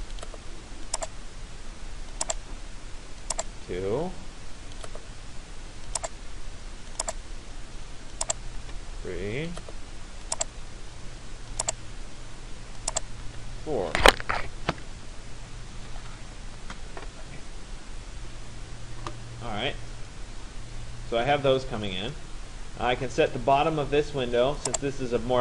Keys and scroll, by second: 3.5 Return, 8.3 Return, 12.8 Return.